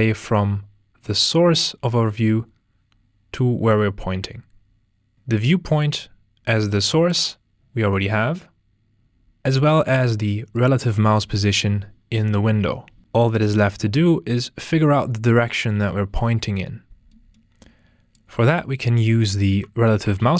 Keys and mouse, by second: 5.4 click, 6.7-10.6 drag, 19.4 ctrl+space.